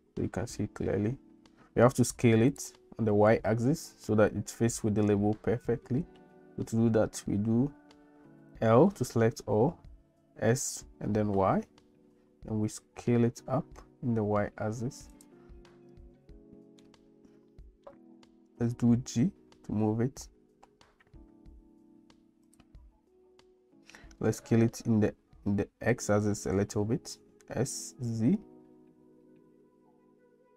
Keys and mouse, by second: 2.5 click, 8.6 l, 10.3 s, 16.3 shift+middle click, 17.5 shift+middle click, 19.2 g, 27.1 s.